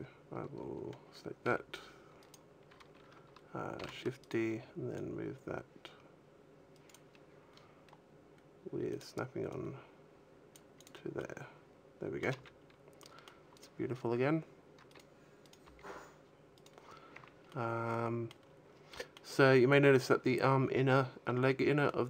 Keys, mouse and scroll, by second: 1.3 g, 2.2 right click, 3.6 shift+d, 4.8 right click, 4.8 click, 8.7 click, 9.3 click, 10.6 click, 11.0 middle click, 12.0 a, 12.3-13.4 scroll up 2, 12.8 middle click, 13.4 right click, 14.7 right click, 15.3 right click, 15.5 g, 16.4 right click, 16.8-17.3 scroll down 3, 16.9 a, 17.3 middle click, 18.3-18.8 scroll up 3, 18.8 middle click, 19.4-19.9 scroll up 1, 21.3 middle click.